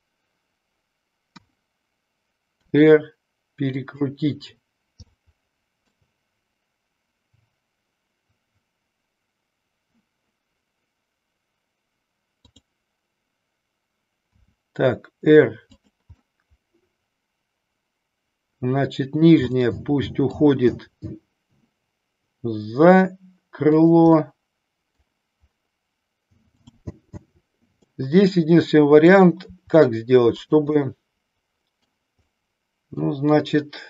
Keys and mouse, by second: 1.2 KP_1, 2.6 r, 5.1-6.0 middle drag, 12.4 click, 14.4 r, 15.9 click, 16.2-19.4 middle drag, 19.6-20.5 middle drag, 20.9 r, 24.4-25.0 middle drag, 26.5 click, 27.9-29.1 middle drag, 29.5 r, 30.4 click, 31.0-32.0 middle drag, 32.4 middle click.